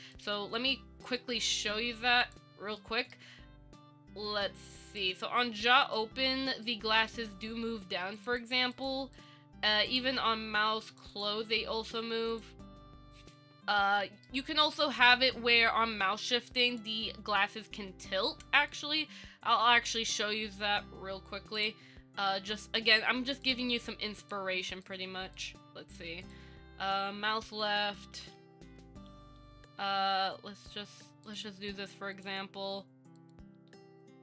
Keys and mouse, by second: 0.4 click, 0.8 middle click, 1.4 shift+middle click, 2.5 click, 3.0 middle click, 6.0 click, 6.9-7.3 middle drag, 8.4 click, 8.9 click, 9.3 click, 11.1 click, 14.4 middle click, 15.7 KP_1, 17.7 Up, 19.3 Tab, 21.8 click, 23.6 click, 24.4 click, 25.6 click, 28.3 KP_1, 29.0 KP_1, 29.6 r, 32.4 click, 33.8 Tab.